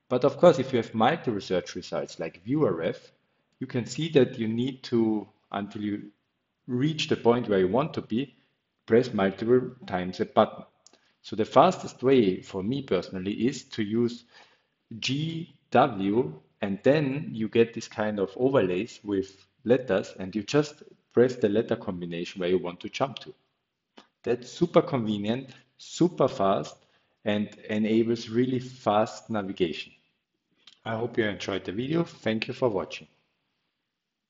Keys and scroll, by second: 0.0-1.4 typing, 1.7 Return, 2.4-4.1 typing, 5.8 Escape, 6.0 Escape, 6.3 Up, 6.5 Up, 7.1 Up, 9.0 g, 9.5 w, 17.9 b, 18.2 r, 20.1-20.9 typing, 22.1 g, 22.6 w, 24.5-25.2 typing, 26.5-27.6 typing.